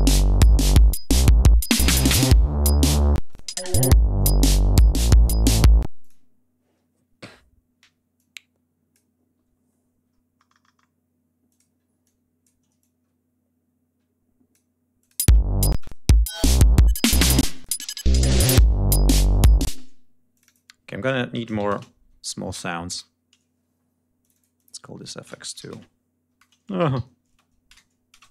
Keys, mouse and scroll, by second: 3.1 space, 3.2 click, 3.6 scroll down 1, 4.1-5.4 scroll down 5, 5.7 ctrl+space, 5.9 ctrl+click, 7.3 scroll down 2, 8.1 click, 10.0 ctrl+scroll down 2, 11.4 click, 11.9 click, 12.7-14.6 ctrl+drag, 14.9 click, 15.1 space, 15.7 click, 16.3 ctrl+scroll up 2, 17.3 space, 17.4 click, 19.1 click, 19.5 space, 20.2 click, 21.0-22.5 typing, 22.8 Return, 24.1 click, 25.2-28.0 typing, 28.1 shift+Return.